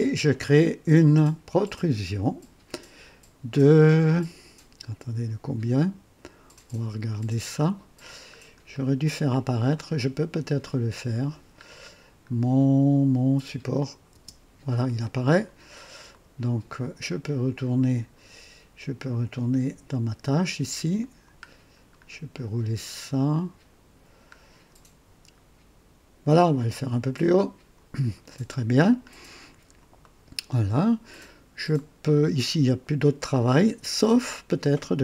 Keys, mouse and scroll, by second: 1.5 click, 5.9-7.3 scroll down 5, 8.2-8.5 scroll up 2, 8.7 right click, 9.7 click, 11.3-11.7 scroll up 1, 13.7 click, 14.1 space, 15.6 scroll up 1, 16.1 right click, 19.3 click, 20.9 click, 21.4-21.8 scroll down 2, 21.9-22.2 scroll up 2, 23.8 scroll up 2, 27.3 click, 28.2 scroll down 2, 28.8 click, 29.3 click, 30.0 right click, 30.7-31.6 drag, 31.7 right click, 33.7 click.